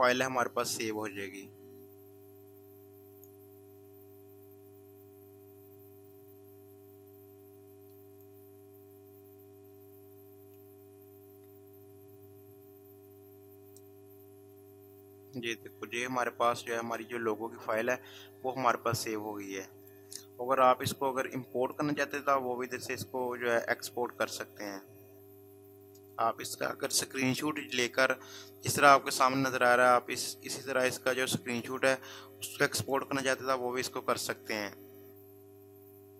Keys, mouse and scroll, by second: 3.2 click, 8.2 click, 11.2 scroll down 1, 19.8 click, 32.8 click.